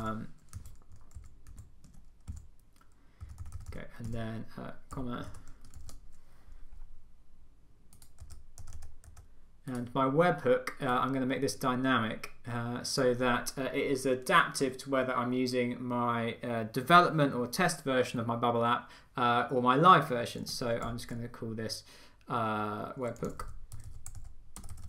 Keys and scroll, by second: 0.0 Left, 0.1 Up, 0.6 Down, 1.2 Up, 1.5 Right, 1.9 Tab, 2.3 Down, 3.2 Left, 5.3 Return, 5.8 super+v.